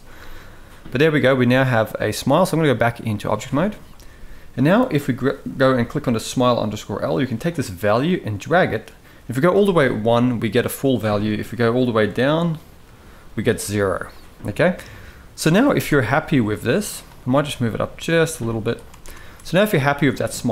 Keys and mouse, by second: 2.4 click, 7.2-9.3 drag, 11.7-13.2 drag, 15.5 Tab, 17.2 g, 18.8 Tab.